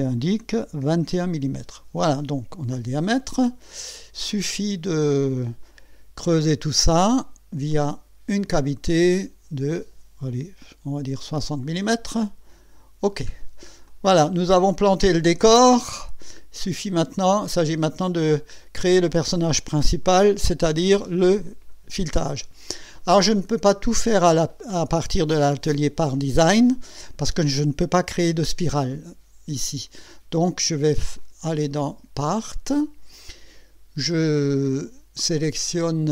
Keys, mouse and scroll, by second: 0.6 KP_2, 0.8 KP_1, 1.1 KP_Decimal, 3.1 click, 4.3-5.8 drag, 7.7 click, 11.2 KP_6, 11.4 KP_0, 12.5 click, 13.3-13.6 scroll down 1, 13.9-14.6 drag, 14.8 scroll up 1, 15.3-16.4 drag, 16.7-17.2 right drag, 17.2-18.1 drag, 18.3 right click, 19.0-19.6 drag, 21.0-22.4 drag, 31.2 click, 32.2 click.